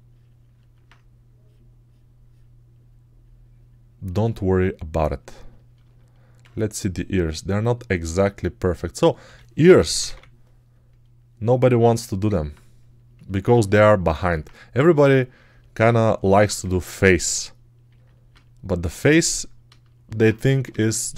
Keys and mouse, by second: 9.1-10.0 typing, 16.4 1, 20.2 1.